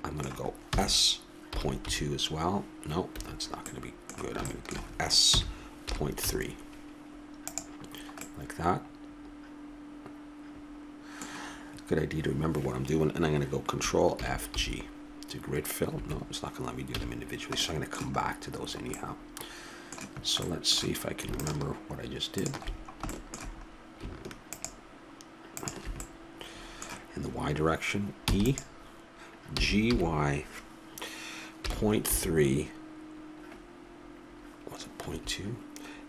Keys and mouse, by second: 0.2 middle click, 1.0 s, 4.0 middle click, 4.2 click, 5.6 s, 7.8 click, 10.9 middle click, 14.5 ctrl+f, 17.3 a, 21.7-23.0 drag, 23.0-27.8 middle drag, 28.5 e, 29.8 g.